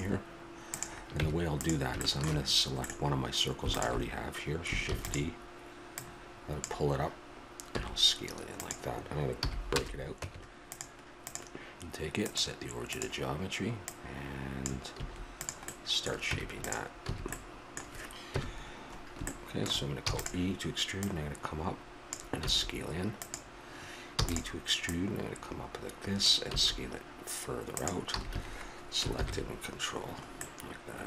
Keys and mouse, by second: 0.7 right click, 1.1 Tab, 2.4 middle click, 3.7-5.2 drag, 4.9 shift+d, 5.9-7.7 drag, 7.7 s, 10.2 Tab, 11.2-13.0 right drag, 15.0 s, 16.2 Tab, 17.1 a, 18.3 KP_1, 20.0 e, 21.8-23.3 drag, 24.1 e, 24.8-26.8 drag, 28.1 a, 28.3 a, 29.1 ctrl+n.